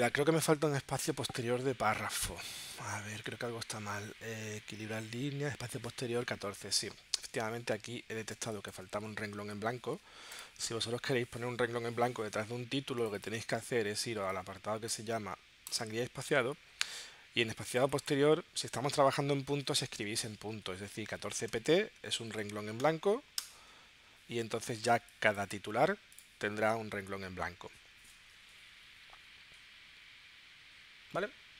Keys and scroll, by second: 8.3 space, 20.5-21.6 typing, 23.4 Tab.